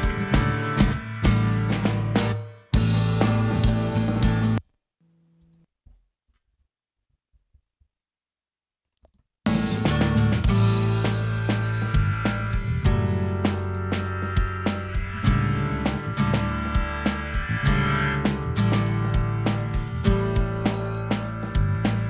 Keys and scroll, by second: 4.3 space, 6.3 super+space, 6.4 super+=, 9.0 space.